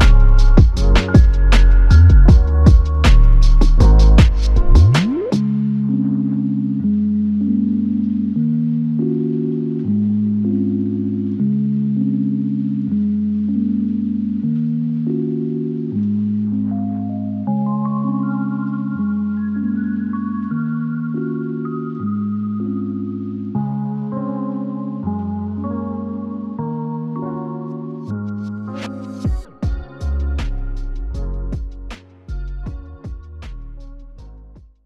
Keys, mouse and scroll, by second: 5.6 alt+click, 10.8 alt+click, 11.9 shift+click, 13.2 alt+click, 15.2 alt+shift+click, 16.5 alt+click, 21.5 typing, 22.5 typing, 26.3 double click, 31.2 double click, 32.5 double click, 32.7 alt+click.